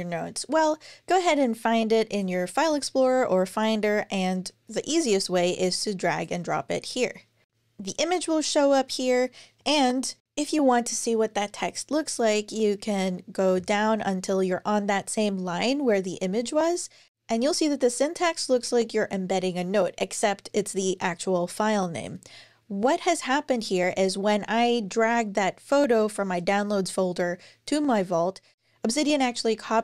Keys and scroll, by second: 13.3 Down.